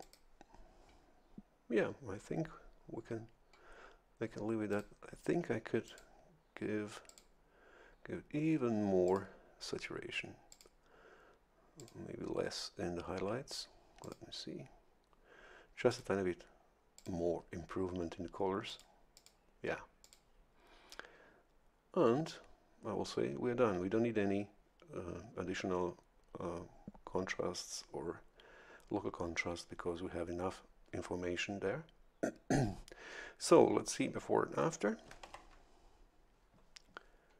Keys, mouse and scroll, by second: 0.0 click, 4.7 click, 5.8 click, 7.1 click, 9.1 click, 10.5 click, 11.8 click, 14.0 click, 15.9 click, 17.0 click, 18.7 click, 19.1 click, 20.0 click, 35.2 ctrl+shift+l.